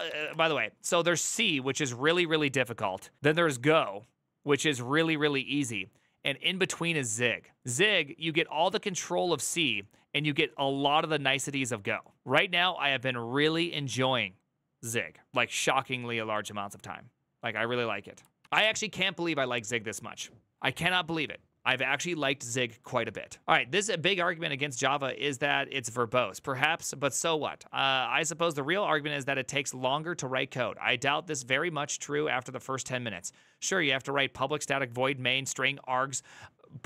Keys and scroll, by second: 0.0 Return.